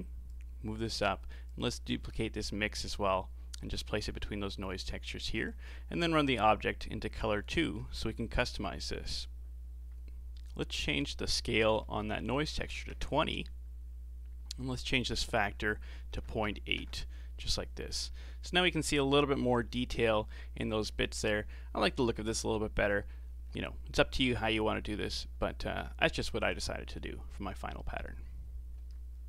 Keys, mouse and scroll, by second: 0.3-1.6 drag, 3.9 shift+d, 6.4 click, 10.9-14.9 drag, 15.3-18.3 drag, 22.1-23.6 scroll down 2, 23.7-25.1 scroll down 4, 25.1-28.0 middle drag.